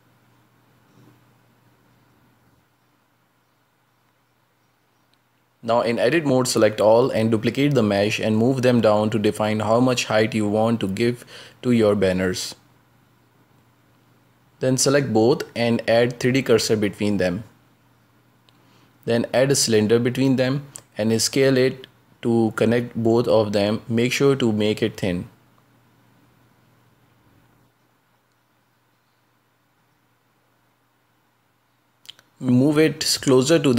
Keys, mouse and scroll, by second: 1.1-4.8 drag, 4.8 ctrl+space, 5.4-5.7 scroll down 3, 5.7-6.7 shift+middle drag, 6.7 right click, 7.3 Tab, 7.7 a, 9.1 scroll down 2, 9.4-10.7 shift+middle drag, 10.7-11.3 scroll down 5, 11.3 shift+middle click, 11.8 shift+d, 13.7-14.1 scroll up 1, 14.1-16.4 middle drag, 16.4 a, 17.2 scroll down 4, 17.9 shift+s, 19.3 scroll up 2, 19.6 shift+a, 21.9 s, 23.1 scroll up 4, 23.4 s, 24.8 s, 26.8-27.2 scroll down 5, 27.2 shift+middle click, 27.6 s, 30.1-30.6 scroll up 5, 30.7 middle click, 31.6 scroll up 1, 32.0 s, 32.6 s.